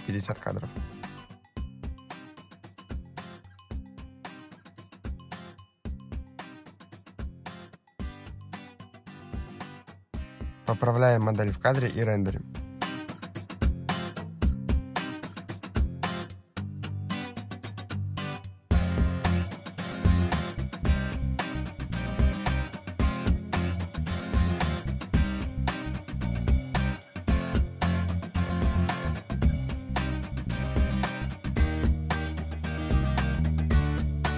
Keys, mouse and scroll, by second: 4.4 click, 6.4 click, 8.4 click, 8.8 click, 10.6 click, 12.6 click, 13.8 click, 14.1 click, 14.6 click, 15.9 click, 18.0 click, 19.1 click, 21.8 click, 22.9 click, 24.9 click, 25.1 click, 25.6 click, 32.2 click, 32.8-33.3 scroll down 5, 33.2 middle click, 33.8-34.2 scroll down 4.